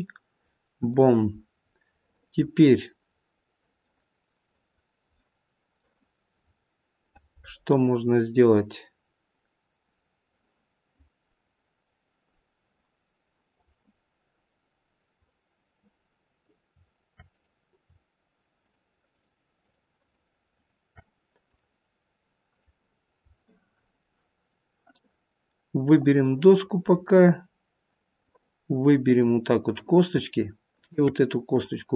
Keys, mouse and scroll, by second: 30.6 click.